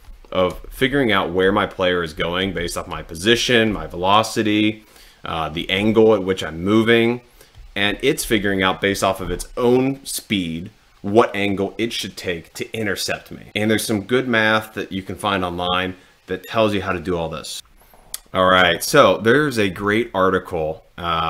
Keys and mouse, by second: 0.7 Right, 1.0 Right, 1.4 Down, 2.3 Right, 2.8 Left, 3.9 Left, 5.8 Up, 7.6 Left, 8.4 Down, 17.6 click, 19.5 middle click, 19.8 middle click, 21.1 click.